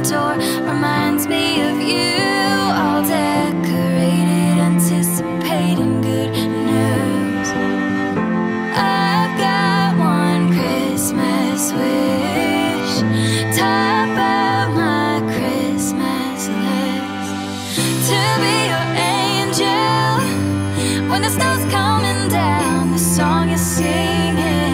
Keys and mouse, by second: 0.8 alt+middle click, 2.0 alt+KP_0, 4.0-5.1 drag, 5.4 click, 6.1 click, 8.3 g, 8.4 g, 10.0 click, 11.0 shift+d, 11.7 shift+z, 13.6 t, 14.4 r, 14.7 z, 16.3 click, 17.5 click, 17.8 shift+click, 18.1 g, 18.4 shift+z, 20.7 r, 21.1 z, 23.7 click, 24.4 click.